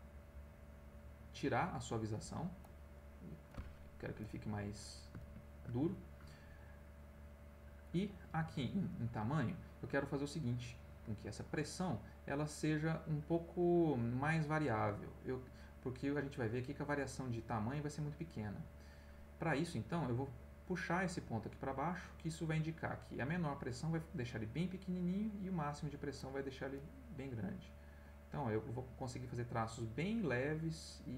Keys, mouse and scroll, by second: 2.6 click, 4.2 click, 4.6 click, 5.2 ctrl+z, 7.8 click, 8.9 click, 16.5 click, 17.7 click, 20.1-22.9 drag, 26.7 click, 27.7-31.1 drag.